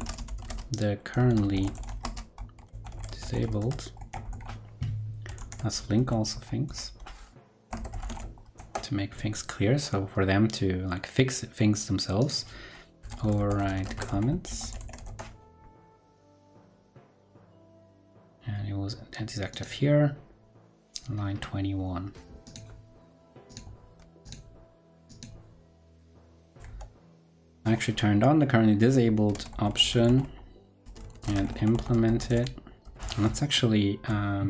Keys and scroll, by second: 5.3 super+t, 23.9 super+c, 26.6 super+v, 27.1 super+Right, 33.9 ctrl+Right.